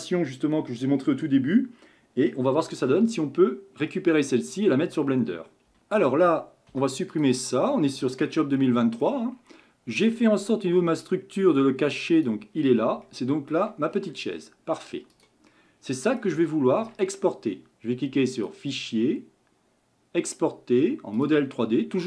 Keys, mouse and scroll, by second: 3.9 shift+middle click, 4.7-5.7 shift+middle drag.